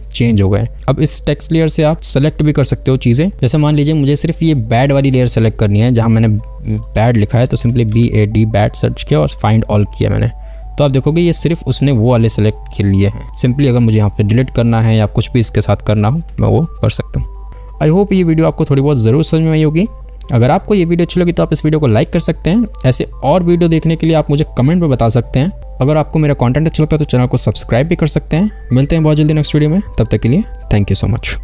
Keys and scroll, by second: 3.3 BackSpace, 7.8 a, 8.1 d, 14.6 Delete, 16.5 ctrl+z.